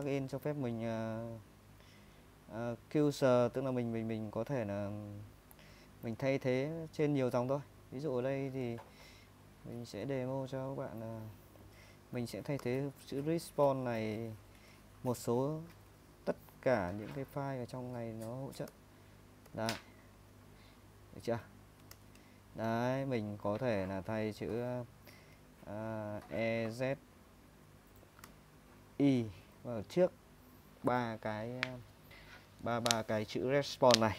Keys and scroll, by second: 0.1-2.1 typing, 4.1-13.1 typing, 18.7 ctrl+n, 19.5 ctrl+n, 22.0 l, 26.2 e, 26.8 z, 28.3 i.